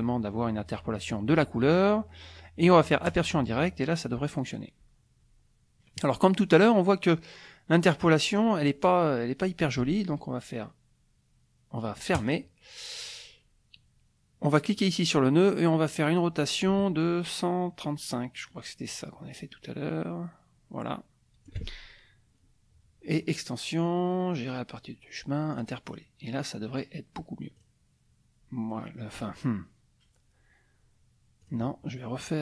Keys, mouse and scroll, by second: 3.0 click, 12.1 click, 14.8 click, 16.1-21.7 drag, 23.1 click, 25.5 click, 26.4 click, 27.6 click, 31.4 click.